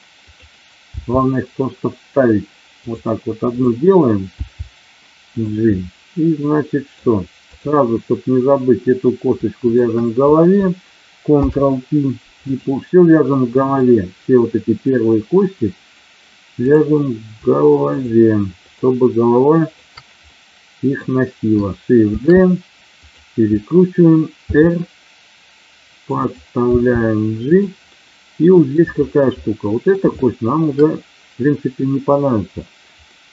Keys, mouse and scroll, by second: 0.3 click, 4.3 g, 5.3 click, 6.4 middle click, 7.5 click, 11.4 ctrl+p, 13.3 middle click, 17.8-19.1 shift+drag, 20.2 middle click, 22.1 shift+d, 23.1 click, 24.5 r, 26.7 g, 27.9 middle click, 29.3 middle click, 30.2 shift+middle click, 33.1-33.3 middle drag.